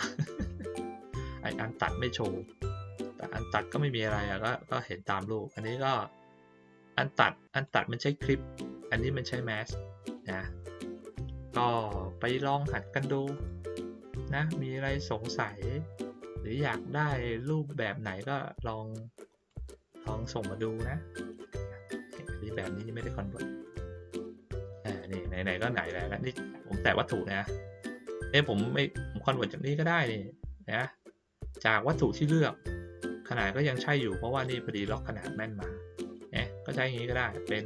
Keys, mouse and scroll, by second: 7.5 click, 13.3 click, 19.4 click, 21.0-22.1 ctrl+middle drag, 21.0-22.4 ctrl+scroll down 2, 22.2 ctrl+middle click, 22.7 middle click, 23.6-24.0 ctrl+scroll up 1, 24.0-24.4 ctrl+scroll down 1, 24.7 ctrl+scroll down 1, 25.7-27.4 drag, 27.7 click, 28.2 click, 34.4 click.